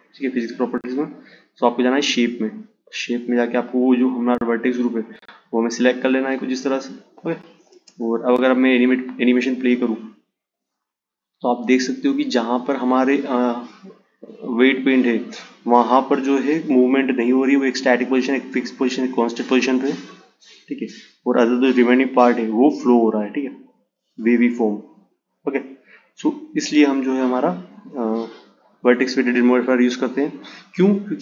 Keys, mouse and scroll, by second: 0.9-6.1 drag, 6.2 space, 10.5 click, 16.7 click.